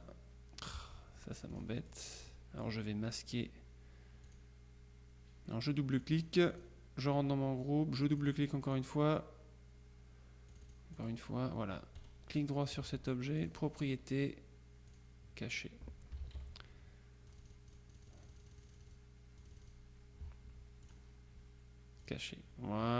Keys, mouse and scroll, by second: 0.0 click, 1.6 click, 4.4 click, 6.1 click, 8.2-9.3 drag, 10.6 click, 12.1 right click, 13.5 click, 15.0 click, 16.3 ctrl+z, 17.4-19.5 drag, 19.6 click, 22.1 click.